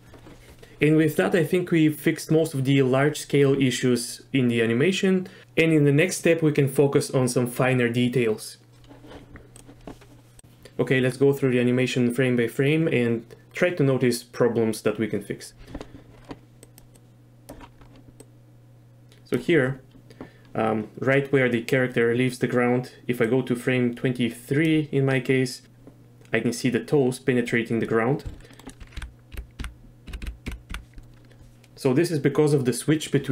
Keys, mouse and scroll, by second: 16.7 click, 17.0-17.5 drag, 18.2-19.4 drag, 23.3 click, 28.3 z, 28.5 click, 29.0 Left, 29.3 Right, 29.6 Left, 30.1 Right, 30.2 Right, 30.5 Left, 30.7 Left.